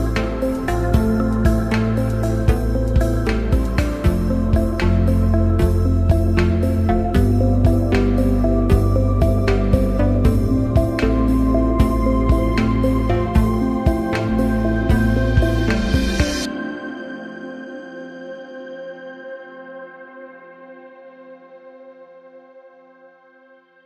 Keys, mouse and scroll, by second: 0.1 shift+click, 4.2-8.3 drag, 10.8 click, 14.1 click, 17.4 click, 21.8 click.